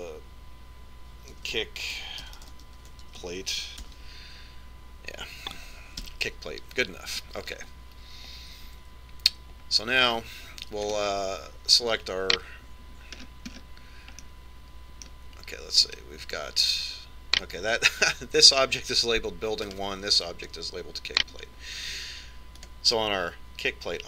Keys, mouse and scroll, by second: 10.1 Tab, 11.3 middle click, 12.3 right click, 14.6-17.3 middle drag, 17.3 right click, 21.1 right click.